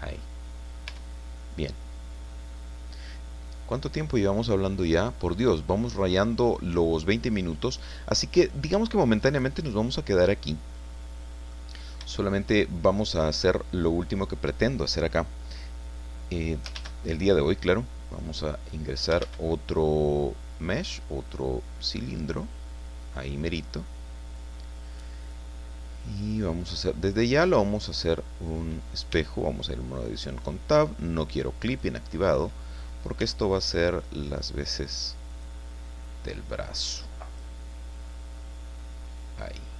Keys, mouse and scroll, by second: 0.2 click, 0.7 middle click, 0.9 Tab, 1.1 middle click, 1.4 click, 1.5 middle click, 2.1 click, 3.8 click, 4.9 click, 5.5-5.9 scroll down 2, 5.9-8.2 drag, 8.2 scroll down 2, 8.3-8.6 scroll up 2, 8.6 scroll down 2, 8.9-11.7 shift+drag, 12.1-13.6 shift+drag, 16.7 shift+a, 19.2 shift+a, 22.1 click, 23.0 scroll down 2, 24.4-25.5 drag, 27.0 click, 28.4 click, 29.1 Tab, 30.0-32.0 drag, 32.2 scroll up 2, 33.2 s, 35.3 click, 36.0-37.6 drag, 38.4-39.7 drag.